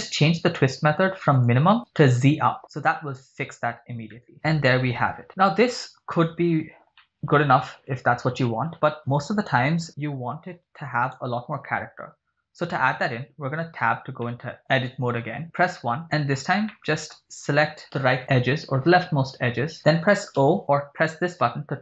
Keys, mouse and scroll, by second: 1.5-2.5 drag, 2.8 scroll down 2, 4.1-5.3 middle drag, 6.8 scroll down 2, 7.1 middle click, 11.2 right click, 12.3 Tab, 13.8 scroll down 2, 14.3 middle click, 14.5 click, 15.7 KP_1, 16.3 scroll up 3, 16.8 shift+middle click, 17.8 right click, 18.3 b, 19.8 scroll down 3, 20.6 o.